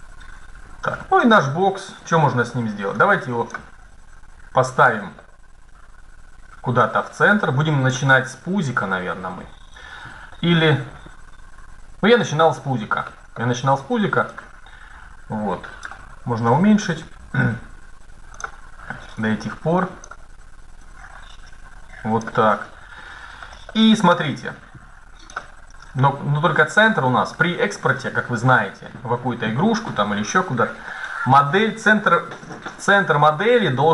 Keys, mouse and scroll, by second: 0.8 middle click, 1.2-2.7 middle drag, 2.7-4.5 drag, 4.6-7.6 middle drag, 7.6 click, 7.8 click, 11.7-14.0 middle drag, 14.0 click, 15.1 click, 16.6 s, 18.9-22.3 drag, 22.3 middle click, 22.4 click, 22.5 middle click, 22.6 click, 22.8-25.6 middle drag, 25.6 KP_1, 26.3-27.3 scroll up 1, 27.4 middle click, 28.2 middle click.